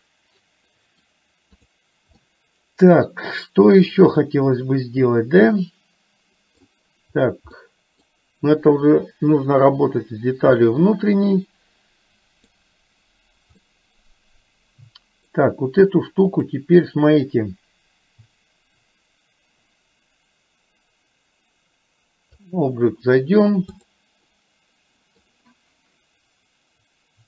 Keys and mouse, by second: 1.8 click, 2.3-6.7 middle drag, 10.7-12.6 middle drag, 13.7-15.4 middle drag, 16.3-22.7 drag, 24.4 middle click.